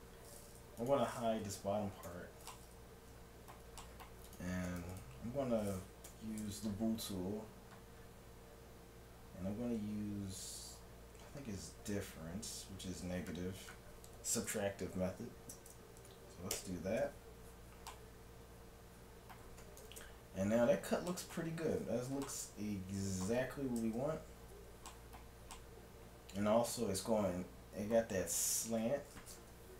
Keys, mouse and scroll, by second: 2.1 h, 2.6 middle click, 4.3-6.9 right drag, 6.1 t, 16.6 ctrl+KP_Subtract, 17.9 middle click, 19.8 KP_1, 20.1 KP_7, 23.5 middle click, 23.8 KP_Enter, 24.0 KP_3, 24.9-27.4 middle drag.